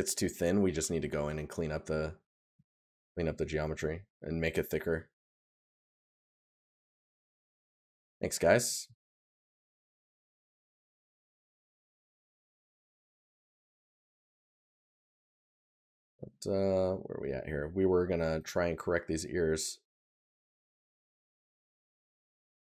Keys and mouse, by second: 0.7 right click, 3.7 right click, 8.8 right click, 19.4 right click, 20.7 right click.